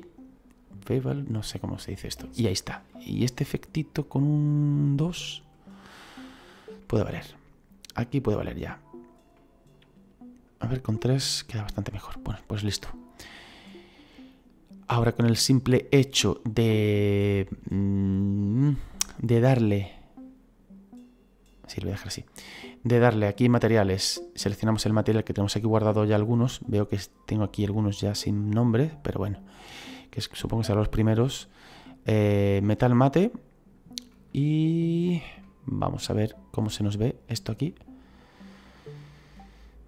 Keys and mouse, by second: 1.2 click, 2.6 middle click, 5.3 click, 6.7 middle click, 9.3 middle click, 10.7 click, 11.8 middle click, 23.1 click, 24.4 click, 32.6 click, 34.3 middle click, 36.7 click.